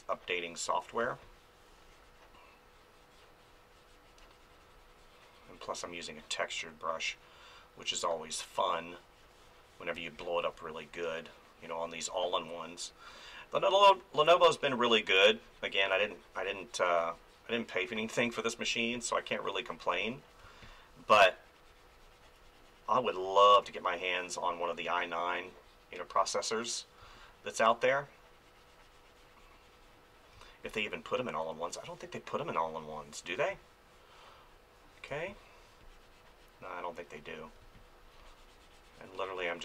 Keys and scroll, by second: 1.0 space, 5.8 space, 9.9 space, 17.9 space, 20.4 space, 27.0 space, 30.4 space, 35.1 space, 37.6 space.